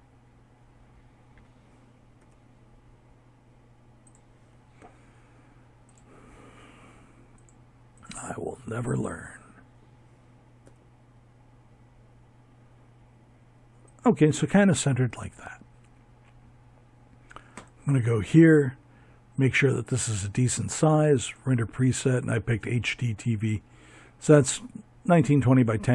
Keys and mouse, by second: 0.2 g, 3.8-8.5 drag, 8.6 g, 15.5-24.5 drag.